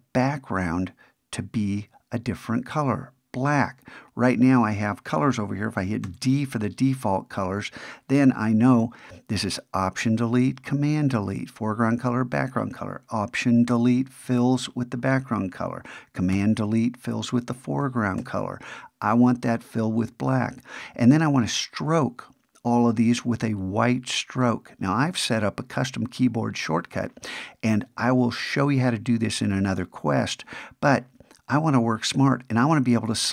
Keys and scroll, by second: 13.7 alt+BackSpace, 16.3 super+BackSpace, 18.2 alt+BackSpace.